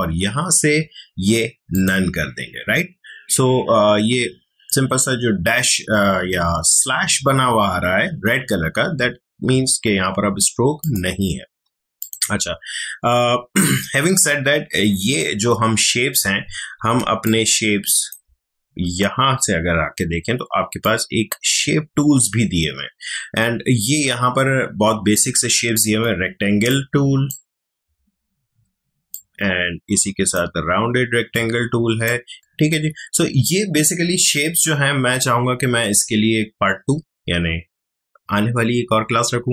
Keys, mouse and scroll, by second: 1.7 click, 10.8 click, 16.9 space, 17.2-20.5 ctrl+drag, 20.8-39.5 drag.